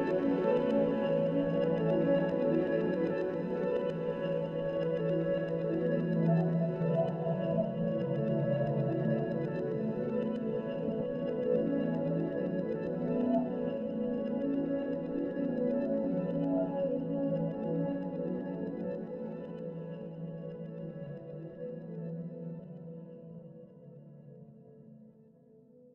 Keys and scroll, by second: 2.2 s, 4.8 s, 8.4 s, 15.6 2.